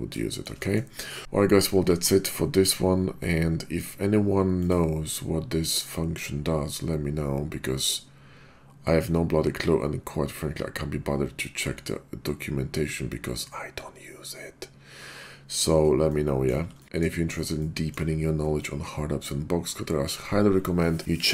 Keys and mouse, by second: 0.2 shift+drag, 0.6 middle drag, 4.5-15.0 drag, 16.1-16.5 middle drag, 16.7 shift+click, 16.8 middle click, 17.5-17.9 shift+middle drag, 18.6-19.2 middle drag.